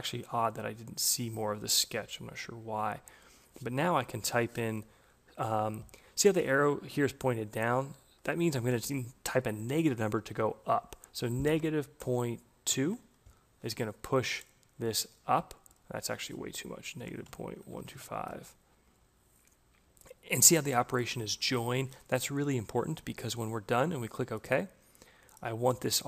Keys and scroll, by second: 11.9 Delete, 12.6 2, 17.1 Delete, 17.2-18.3 typing.